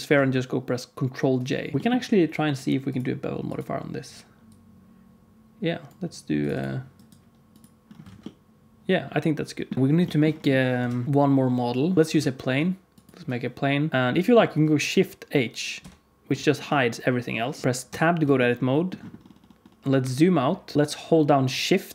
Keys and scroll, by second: 1.7 alt+a, 1.7 ctrl+s, 8.0 alt+a, 9.7 ctrl+s, 10.7 KP_1, 11.0 shift+a, 12.0 shift+x, 12.1 shift+a, 15.7 shift+h, 17.5 KP_1, 17.8 Tab.